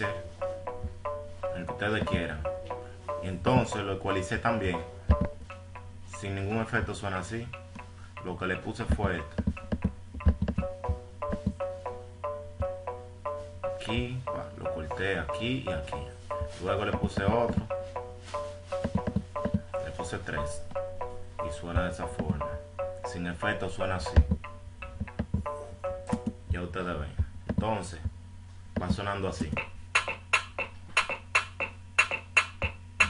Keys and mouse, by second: 0.9 F1, 1.1 click, 7.0 right click, 10.9-12.7 right drag, 20.7 click, 21.1 right drag, 21.2 click, 26.5-27.2 right drag, 27.2 F5, 28.1 F1.